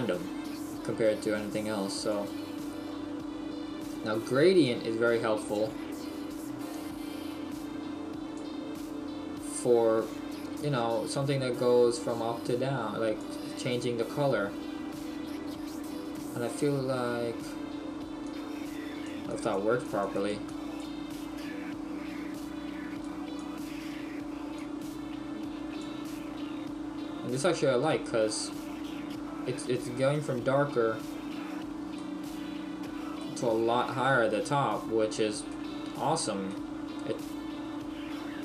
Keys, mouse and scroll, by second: 4.7 click, 6.4 click, 8.5 click, 11.5 click, 23.6 click, 27.8 middle click, 31.9 middle click, 33.1-33.4 scroll down 1, 38.2 scroll down 2.